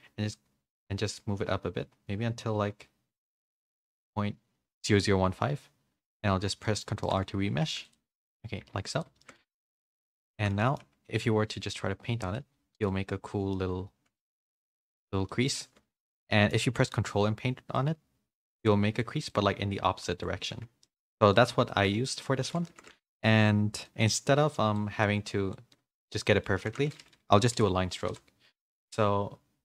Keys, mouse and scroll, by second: 6.0 ctrl+r, 6.6 middle click, 7.0 shift+middle click, 7.6 f, 8.1 z, 8.2 middle click, 8.6 f, 9.2 shift+middle click, 10.3 shift+middle click, 10.3 f, 10.6 middle click, 11.6 click, 11.6 f, 12.9 middle click, 14.1 middle click, 15.3 middle click, 16.1 shift+middle click, 16.3 middle click, 17.7-19.0 ctrl+drag, 19.3-20.5 middle drag, 20.8 shift+middle click, 21.3 middle click, 22.0 middle click, 22.5 ctrl+z, 23.8 middle click, 24.7 click, 25.7 middle click, 26.7 ctrl+z, 26.9 middle click, 27.5 n.